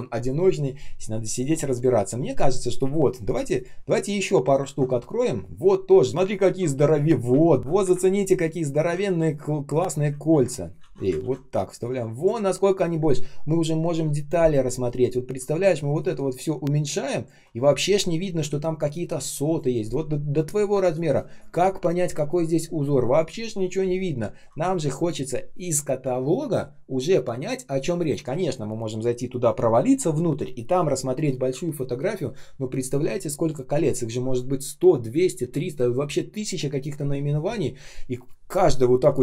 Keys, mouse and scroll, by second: 4.6 ctrl+ц, 8.9 ctrl+c, 10.2 ctrl+м, 11.1 ctrl+м, 15.9 alt+click, 20.4 shift+click.